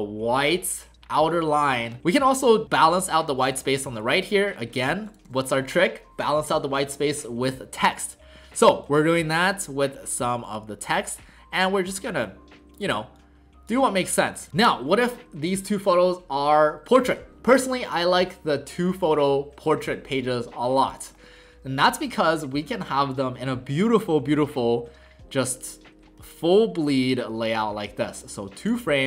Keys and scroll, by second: 5.2 alt+w, 14.4 w.